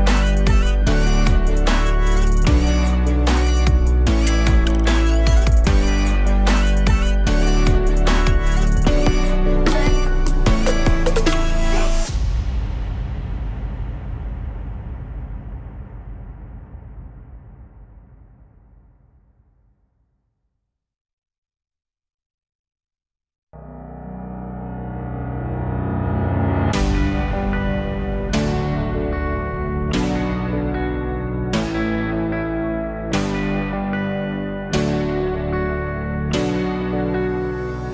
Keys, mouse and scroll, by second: 0.6-2.7 drag, 2.7-3.0 scroll down 1, 3.0-5.6 alt+drag, 6.5 click, 7.9 click, 8.8-10.0 drag, 10.3 scroll down 1, 12.3 scroll up 5, 12.8-14.3 middle drag, 14.3 click, 16.9 click, 17.9 click, 20.6-22.9 drag, 22.9 KP_Divide, 23.6-24.0 alt+drag, 24.0-24.4 alt+middle drag, 24.4-25.1 scroll down 2, 25.1 z, 25.6 click, 27.2 Tab, 27.9 a, 30.6 click, 31.9-33.4 drag, 33.4-34.4 drag, 34.4 o, 35.9-37.9 drag.